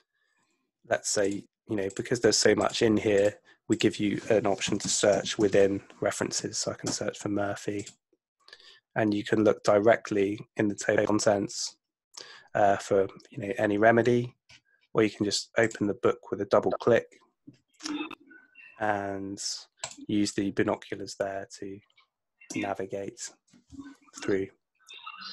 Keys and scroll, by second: 4.4-6.1 typing.